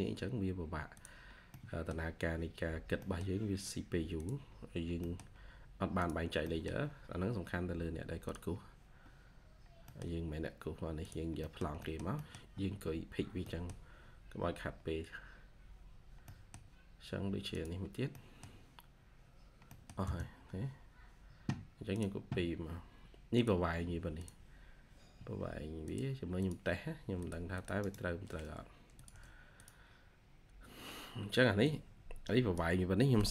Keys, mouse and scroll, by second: 1.4 middle click, 2.9 middle click, 4.6-4.9 scroll up 1, 4.9 middle click, 5.2-6.1 scroll up 1, 6.1-6.8 scroll down 2, 6.4 middle click, 6.8-7.9 scroll up 1, 9.7 middle click, 9.9-10.9 scroll down 1, 11.3 middle click, 12.5-13.3 scroll down 1, 13.3 middle click, 13.9 scroll up 1, 14.5-15.6 scroll down 1, 16.0 scroll down 1, 16.2 middle click, 16.4 scroll up 1, 17.8 scroll down 1, 18.0 middle click, 18.7 scroll up 1, 19.3-19.6 scroll down 1, 19.6 middle click, 19.9 space, 21.9 typing, 22.0-22.6 scroll down 1, 27.4 double click, 27.7 right click, 29.0 typing, 30.0-30.6 scroll down 1.